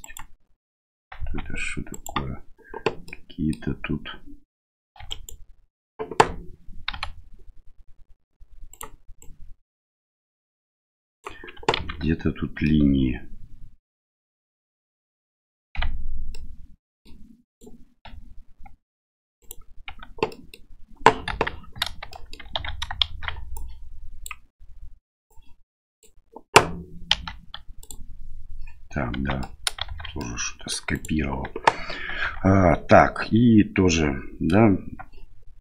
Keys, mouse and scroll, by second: 0.0 right click, 1.2 Tab, 2.0 right click, 3.1 middle click, 5.0 2, 5.1 right click, 6.9 g, 9.2-11.2 right drag, 11.7 ctrl+z, 12.6-15.3 middle drag, 15.8 Tab, 16.3-17.0 middle drag, 17.5 right click, 18.0 Tab, 18.7 Tab, 19.4 right click, 19.9 Tab, 20.3 middle click, 21.3 KP_1, 22.1 shift+middle click, 22.5 1, 23.1 shift+z, 23.5 click, 25.4 click, 27.1 m, 29.2 Tab, 29.4 middle drag, 29.9 shift+z, 30.2 middle click, 30.9 right click, 32.2 Tab.